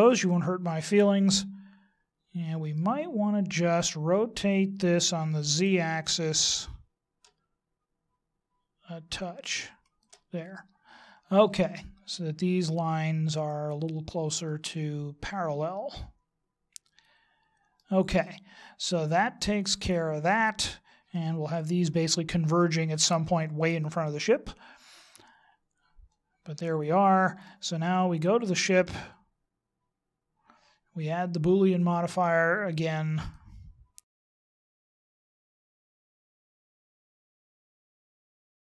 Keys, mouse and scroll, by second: 5.4 r, 14.4 middle click, 18.2 middle click, 24.4 middle click, 29.9 right click, 31.7 click, 34.6 right click, 35.1 right click, 35.3 click, 35.4 click, 35.7 click, 36.9 right click, 37.2 right click, 37.4 click, 38.0 click, 38.6 right click.